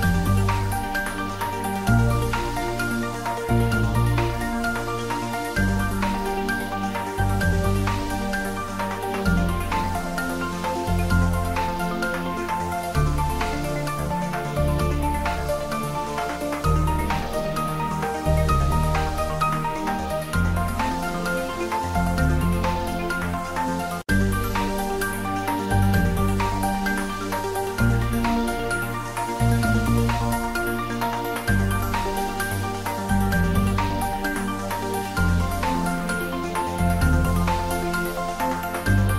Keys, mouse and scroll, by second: 0.3 click, 2.2 Return, 3.6 Return, 3.7 ctrl+d, 4.1 click, 5.2 middle click, 6.1 click, 6.5-8.1 middle drag, 8.1-9.8 drag, 12.4 middle click, 13.0 click, 13.6 Return, 14.3-19.2 drag, 19.2 ctrl+s, 22.8 click, 26.2 click, 26.7 ctrl+s, 27.4 3, 27.9-29.1 ctrl+middle drag, 29.1 ctrl+s, 29.7 middle click, 30.5 middle click, 31.4 click, 32.2 ctrl+s, 37.6-39.1 middle drag.